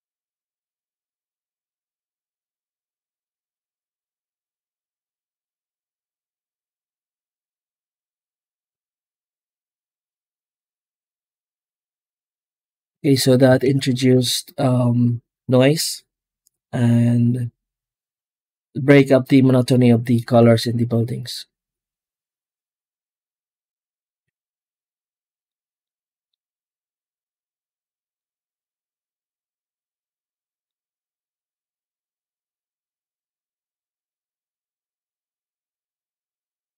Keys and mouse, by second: 4.8 click, 5.9-6.3 middle drag, 9.1 middle click, 11.7 z, 13.5 ctrl+s, 14.0 z, 19.5 middle click, 20.1 z, 24.0 z, 25.7 middle click, 26.7 click, 27.4-28.8 middle drag, 30.2 middle click, 31.3-32.3 drag, 34.4 z, 35.9-36.7 middle drag.